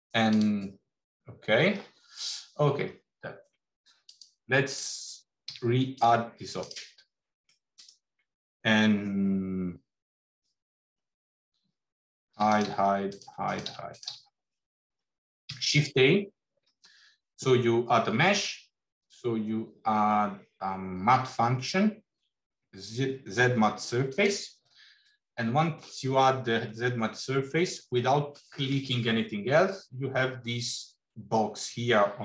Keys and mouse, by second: 3.9 click, 5.3 x, 7.3 middle click, 12.3 h, 12.4 click, 12.5 h, 13.1 click, 13.1 h, 13.4 click, 13.8 click, 14.0 h, 15.4 shift+a, 24.9-25.8 drag.